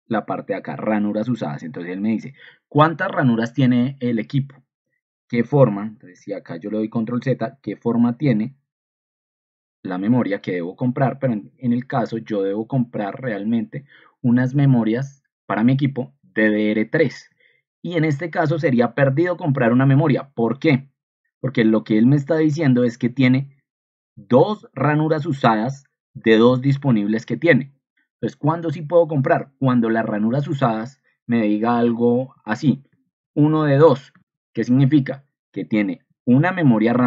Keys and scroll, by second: 6.2 ctrl+z, 8.3 ctrl+2, 31.7 ctrl+t, 33.0-34.2 typing, 34.8 Escape, 36.9 ctrl+2.